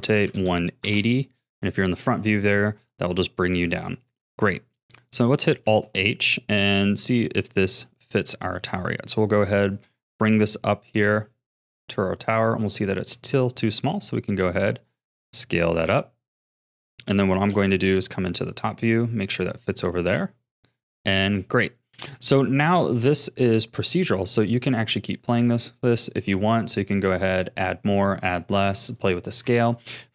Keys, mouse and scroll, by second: 1.6-2.0 scroll down 1, 2.0 a, 2.6 scroll down 4, 3.2-5.6 shift+middle drag, 5.6 alt+h, 6.8 click, 7.8-9.1 shift+middle drag, 9.1 g, 10.3 g, 12.6-13.9 shift+middle drag, 13.9 s, 15.1 g, 17.5 KP_7, 18.3 g, 20.1 KP_1, 21.2 g, 22.1 a, 22.9-25.9 middle drag, 26.9-28.9 drag, 29.6 a.